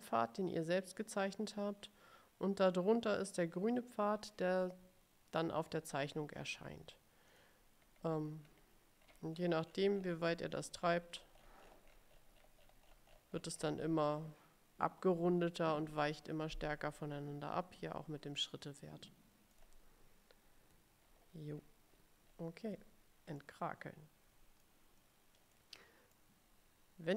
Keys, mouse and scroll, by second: 7.4 click, 7.9-12.9 scroll up 15, 12.9 scroll down 1, 12.9-14.1 scroll up 2, 19.6 click, 21.1-22.6 ctrl+scroll down 8, 22.6-23.1 ctrl+scroll up 2, 23.5-24.9 drag, 25.6 middle click.